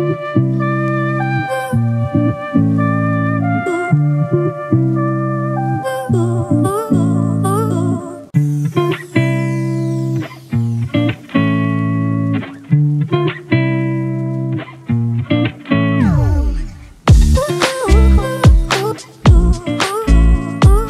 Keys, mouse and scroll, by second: 11.2-12.2 typing.